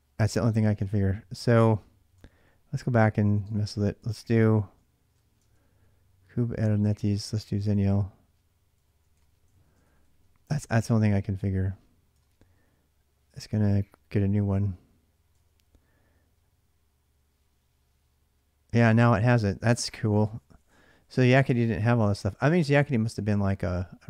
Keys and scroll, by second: 0.3 ctrl+[, 0.4 k, 0.6 k, 2.0 Return, 2.0-12.0 typing, 12.0 Return, 15.2 ctrl+[, 15.4 k, 15.5 k, 17.1 Return.